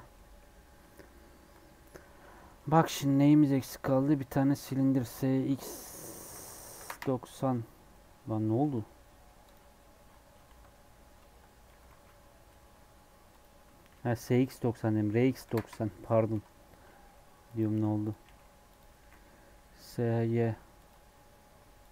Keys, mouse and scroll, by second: 0.0-1.3 middle drag, 1.3 KP_7, 2.3 shift+middle click, 2.7 shift+a, 5.0 s, 7.6 scroll down 4, 7.9 middle click, 8.6 ctrl+z, 9.0 middle click, 9.4-10.5 drag, 10.5 ctrl+middle click, 11.2 ctrl+z, 11.6 g, 13.9 r, 16.3 KP_7, 16.6-16.9 scroll up 4, 16.9 s, 17.6 g, 18.9 s, 18.9 s, 21.1 g.